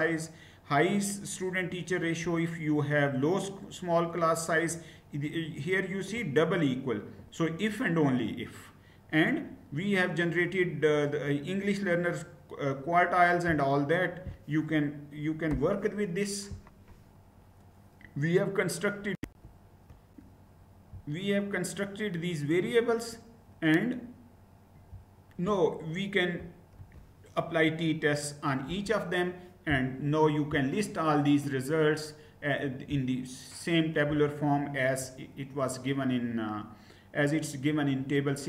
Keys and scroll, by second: 15.2 Return, 18.9 shift+F9, 19.0 shift+Down, 19.0 ctrl+c, 26.4 ctrl+v, 28.3 Return.